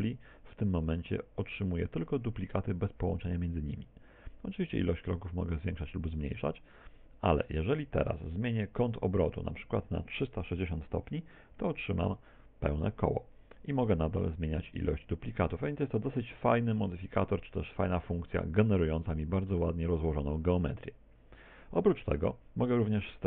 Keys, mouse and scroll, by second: 5.5 click, 9.5 click, 14.1 click, 18.9 shift+middle click.